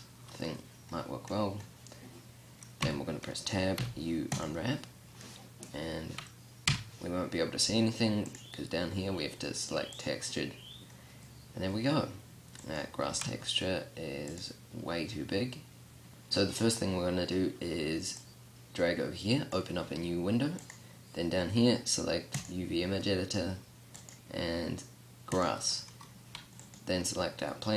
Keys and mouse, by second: 3.1 Tab, 4.0 u, 6.9 Tab, 8.5-9.6 drag, 12.8-13.3 right drag, 13.3-14.6 drag, 13.3 g, 16.1 ctrl+z, 18.5-24.1 drag.